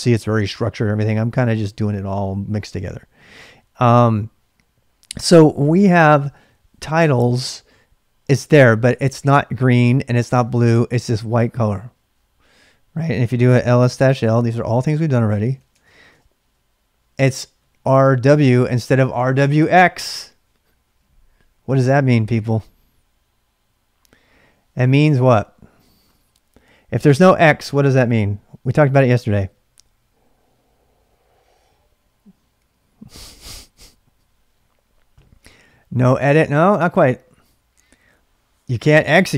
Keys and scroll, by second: 13.3-16.0 typing, 16.1 Return.